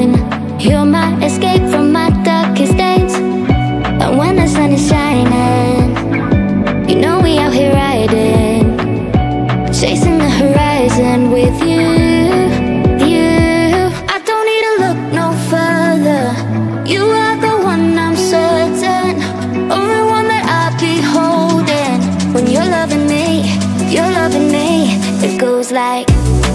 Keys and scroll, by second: 4.6 Down, 6.3 Up, 8.6 Down, 12.6 Down, 20.0 Down, 21.3 Up, 23.1 Down.